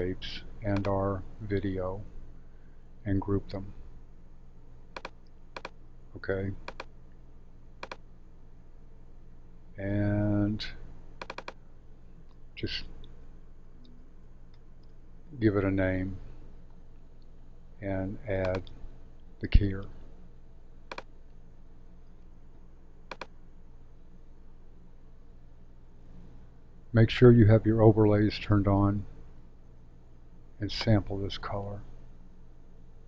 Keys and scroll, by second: 3.1 shift+super+g, 12.8-15.0 typing, 25.8 super+/.